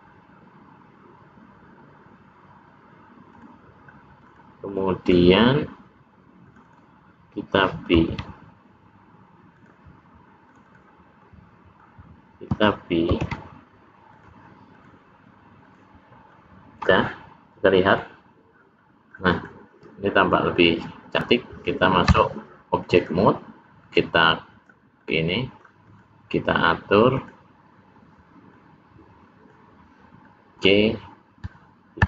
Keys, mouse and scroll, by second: 4.2 click, 4.6 middle click, 6.3 click, 6.6 click, 7.9 ctrl+b, 10.4 click, 10.6 click, 11.1 middle click, 13.0 ctrl+b, 14.7 click, 15.5 click, 16.2 middle click, 18.0 click, 18.7 middle click, 19.2 click, 19.7 middle click, 22.1 Tab, 23.0 click, 23.9 click, 25.0 middle click, 25.9 click, 27.1 click, 28.5 middle click, 30.2 middle click.